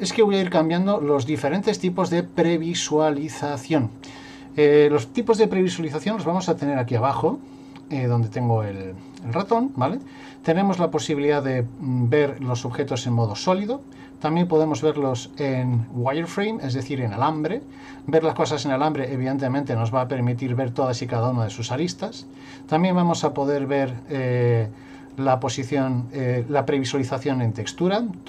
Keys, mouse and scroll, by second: 0.7 shift+middle click, 1.3 middle click, 2.4 middle click, 9.9 click, 15.7 middle click, 19.0 middle click, 20.5 middle click, 22.3 click.